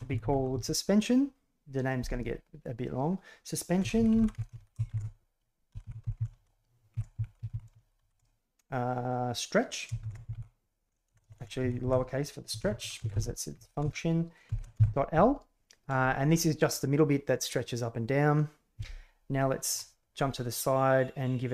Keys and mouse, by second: 4.7 BackSpace, 11.2 BackSpace, 11.3 BackSpace, 19.6 KP_3.